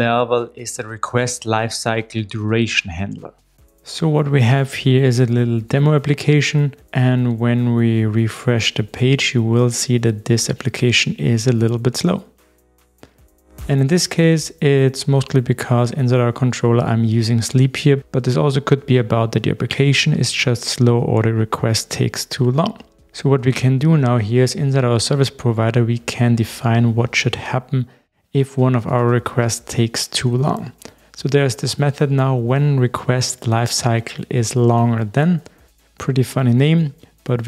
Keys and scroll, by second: 13.6 super+b, 20.5 super+e, 24.0 super+/.